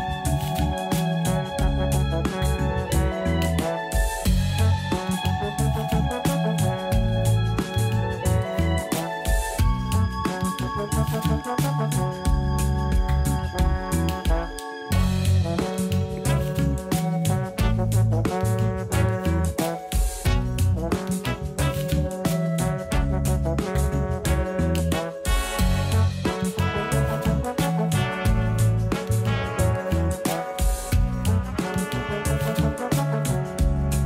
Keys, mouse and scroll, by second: 4.0-7.0 drag, 7.5 a, 7.7 a, 11.0 click, 18.0 click, 30.5 click, 32.6 click.